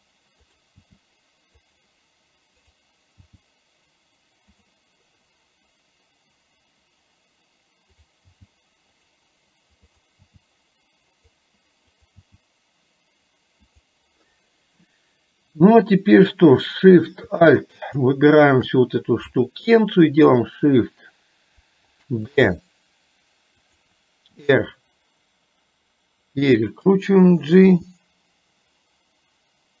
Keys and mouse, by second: 0.6 click, 8.0 click, 10.1 click, 10.4 g, 12.2 g, 18.1 click, 22.5 shift+d, 24.4 r.